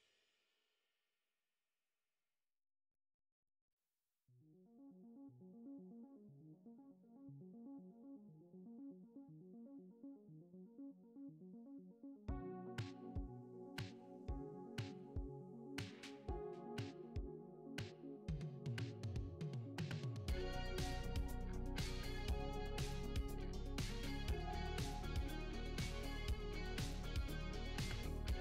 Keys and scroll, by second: 0.0-0.6 typing, 5.4 a, 5.9 d, 7.5-10.3 typing, 11.4-15.2 typing, 18.6 e, 18.6 a, 20.3 d, 23.8 d, 24.1 s, 24.2 q, 24.8 w, 28.2-28.4 typing.